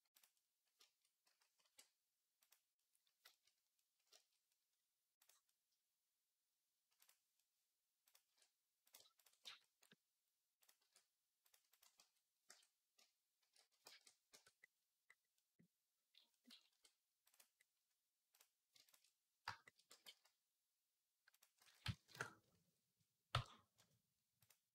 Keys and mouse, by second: 1.1 s, 3.2-6.8 middle drag, 6.8 click, 7.1-10.4 middle drag, 8.0 e, 9.2 f, 10.4 click, 10.5-19.2 middle drag, 10.6 e, 11.5 ctrl+click, 11.8 f, 12.3 Tab, 13.2 shift+d, 13.7 ctrl+a, 14.1 Tab, 16.5 ctrl+r, 18.5 shift+a, 19.2-24.3 shift+drag, 19.7 e, 21.4 s, 23.1 n, 24.3 middle click.